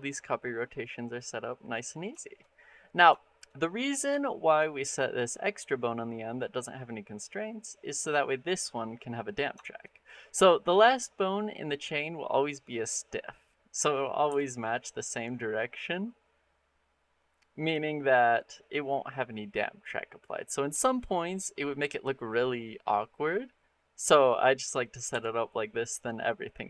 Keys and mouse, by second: 2.0 shift+drag, 2.4 middle click, 3.0 shift+middle click, 3.3 middle click, 4.0 shift+middle click, 6.9 middle click, 7.8 click, 9.4 shift+middle click, 9.8 middle drag, 10.7 click, 14.1 r, 20.1 click, 24.0 click, 24.4 middle click, 24.9 r.